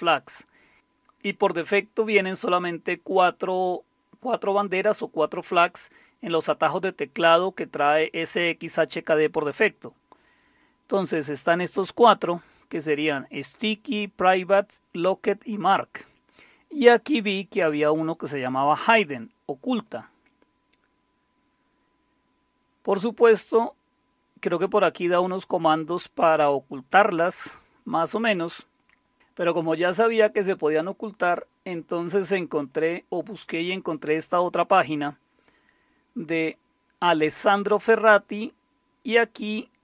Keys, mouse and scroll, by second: 0.2-0.7 scroll down 1, 9.4-12.8 drag, 17.2-18.7 drag, 19.7 click, 20.4 scroll down 2, 21.1-22.4 scroll down 4, 22.9-26.4 scroll down 7, 26.4-27.4 scroll down 1, 27.5-28.8 scroll down 1, 28.8-29.5 scroll up 1, 29.5 click, 32.7 click, 38.7-39.8 scroll down 1.